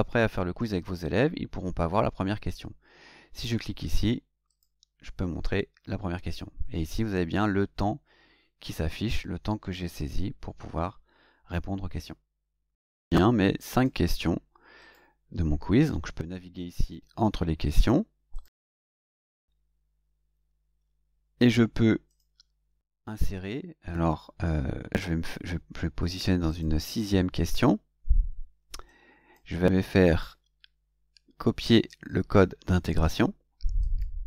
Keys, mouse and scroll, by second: 4.4 click, 12.7 click, 13.6 click, 14.7 click, 16.7 click, 17.7 click, 18.2 click, 22.0 click, 26.4 click, 28.8 click, 29.9-31.7 right drag, 33.7 click.